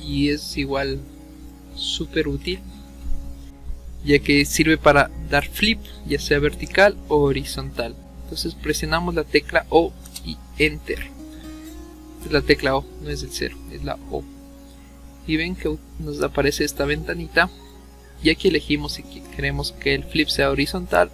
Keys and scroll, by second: 2.4 ctrl+z, 9.6 o, 10.1 Return.